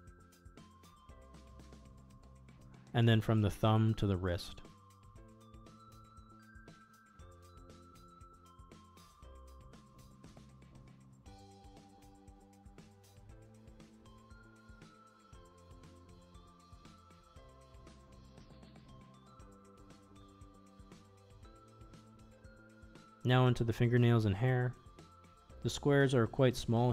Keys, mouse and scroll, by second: 0.8 shift+middle click, 1.4-3.4 middle drag, 3.9 middle click, 4.6 alt+click, 5.0-7.2 middle drag, 7.7 alt+click, 8.4 middle click, 9.3 ctrl+e, 10.7-14.0 middle drag, 14.1 middle click, 14.7 Tab, 15.7 click, 16.1 middle click, 17.8-19.1 middle drag, 19.4-22.8 middle drag, 23.4 Tab, 23.4 middle click, 23.6 middle click, 24.2 Tab, 24.3 a, 25.3 u.